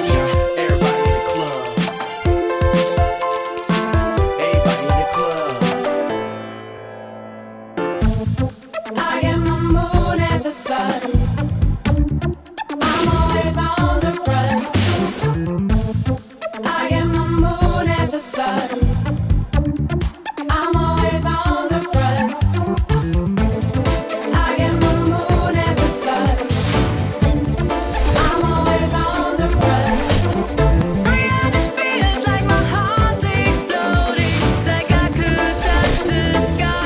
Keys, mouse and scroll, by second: 4.1 alt+drag, 5.2 alt+click, 5.8 alt+drag, 7.3 alt+click, 8.1 alt+click, 10.6 click, 12.0 click, 15.7 click, 16.3 click, 16.6 click, 19.6 click, 25.5 click, 26.0 click, 27.1 click, 29.3 click, 34.9 click.